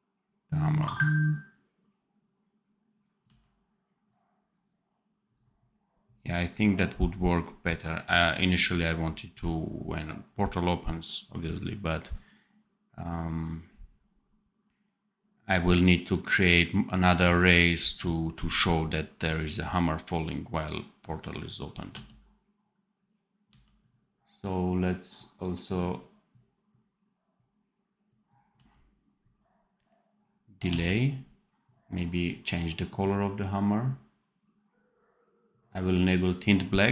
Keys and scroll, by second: 3.1 d, 17.0 d, 21.8 d, 23.4 d, 28.4 d, 30.6 d.